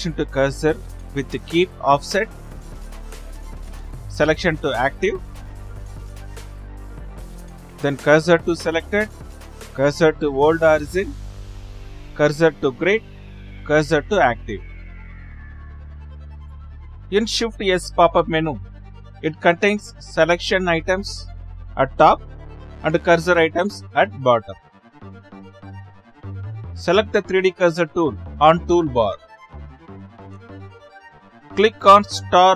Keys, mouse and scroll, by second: 26.9-32.0 drag.